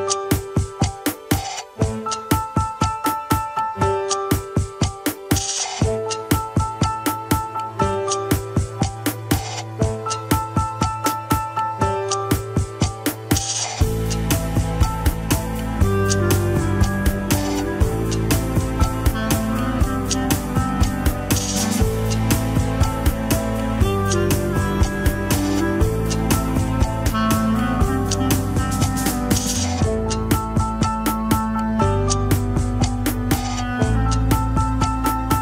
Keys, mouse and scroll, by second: 0.4-1.2 middle drag, 1.2 h, 1.8 click, 2.2 KP_1, 2.4-3.0 scroll up 7, 2.7 Tab, 3.2 alt+z, 3.8 click, 4.1 alt+z, 5.3 g, 6.3 alt+z, 7.3 click, 9.1 ctrl+l, 9.7 scroll down 2, 10.4 c, 11.2 KP_3, 11.6 alt+z, 12.4 click, 12.8 g, 14.8 alt+z, 16.8 scroll up 2, 17.1 alt+z, 17.3 shift+middle click, 17.8 scroll down 2, 18.0-19.2 middle drag, 19.2 KP_1, 19.4 alt+z, 19.8 click, 20.5 alt+z, 20.7 KP_3, 21.2 g, 22.2 alt+z, 22.6 KP_1, 23.3 middle click, 23.6 scroll up 1, 24.0 middle click, 24.2 alt+z, 24.7 shift+click, 25.1 alt+z, 25.7 alt+z, 25.8 middle click, 26.3 KP_3, 27.7 click, 28.2 g, 29.1 middle click, 29.7 g, 30.6 middle click, 31.2 g, 32.4 scroll up 3, 33.3 click, 33.4 KP_1, 33.7 alt+z, 34.1 click, 34.5 alt+z, 34.8 g.